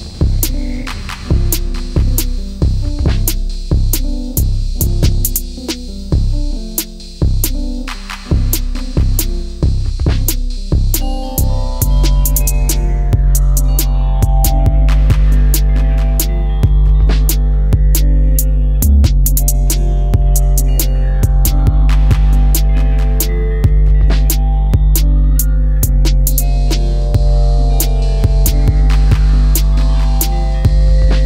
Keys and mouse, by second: 1.2 middle click, 2.0 click, 4.4 Delete, 4.7-5.3 middle drag, 6.2 click, 7.2 click, 7.7-8.4 middle drag, 9.4-9.8 middle drag, 10.3-11.1 middle drag, 11.7 middle click, 12.7 click, 13.4-14.0 drag, 15.0 Delete, 15.6 click, 16.3 click, 16.9 Delete, 17.3-17.7 middle drag, 19.1-20.1 middle drag, 22.2 ctrl+i, 23.3 h, 24.2 KP_1, 25.2 click, 25.7 Tab, 26.8 click, 28.2 l, 29.2 KP_1, 29.7 KP_7, 30.8 g.